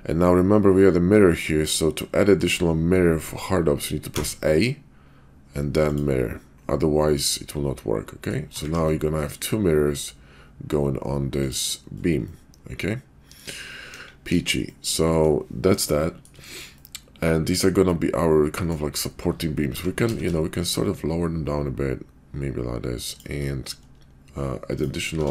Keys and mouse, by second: 5.9 click, 7.2-8.3 middle drag, 8.5 ctrl+`, 12.3-13.4 middle drag, 13.9 KP_5, 14.3 KP_5, 14.6-15.2 middle drag, 16.0-16.3 shift+middle drag, 16.7-18.6 middle drag, 19.6 g, 25.0 shift+a.